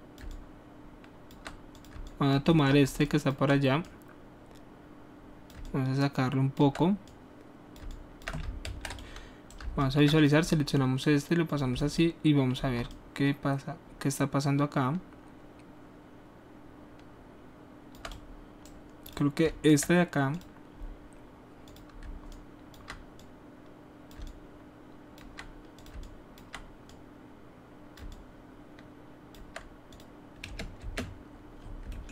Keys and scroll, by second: 8.6 ctrl+alt+z, 30.4 space.